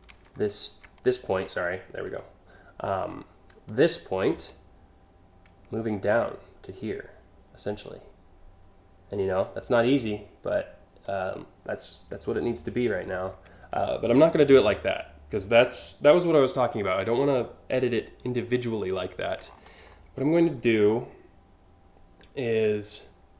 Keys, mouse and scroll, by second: 0.6 click, 1.1 click, 1.7 click, 2.6 click, 3.3 click, 4.1-9.5 drag, 10.7-12.9 drag, 13.3 ctrl+z, 13.7 ctrl+z, 14.6 ctrl+alt+z, 18.7-19.8 scroll down 4, 23.1-23.3 drag.